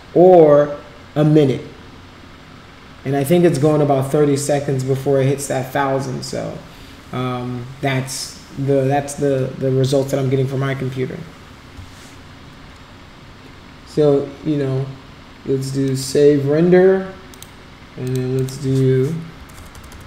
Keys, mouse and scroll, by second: 15.9 click, 17.3 click, 18.1 click, 18.4 click, 19.7 BackSpace.